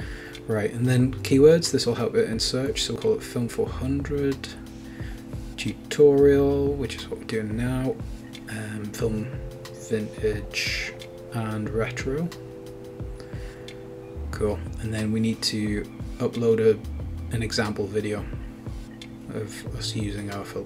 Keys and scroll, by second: 4.3-6.0 typing, 6.5 Return, 7.1-17.3 typing, 13.8 Return.